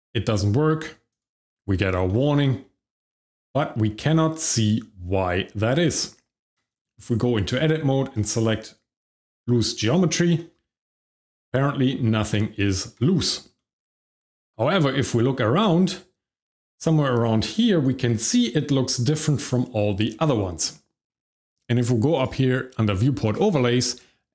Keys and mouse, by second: 1.1 click, 2.0-2.4 shift+middle drag, 2.7 shift+middle drag, 3.2-5.6 shift+middle drag, 6.0 Tab, 8.1-9.8 drag, 10.3-12.2 shift+middle drag, 12.6 Tab, 13.7-17.3 shift+middle drag, 22.1-23.8 drag.